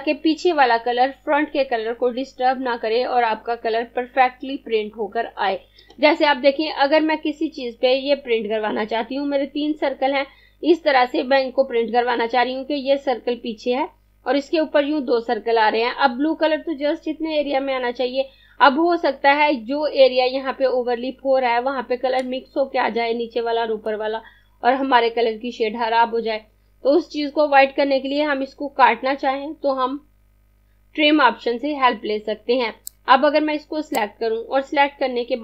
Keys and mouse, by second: 32.4 click.